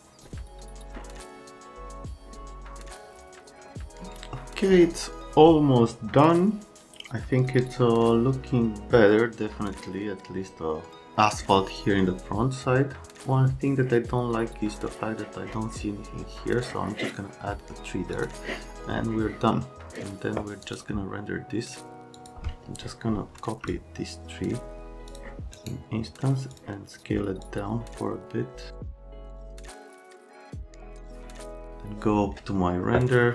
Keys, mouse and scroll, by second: 18.1 click, 20.6 click, 22.1 click, 23.7 shift+click, 25.1 click, 25.5 right click, 26.5 click, 27.4 click, 29.0 right click, 29.2 click, 30.0 click, 30.7 click, 31.1 F3, 31.3 click, 31.6 F10.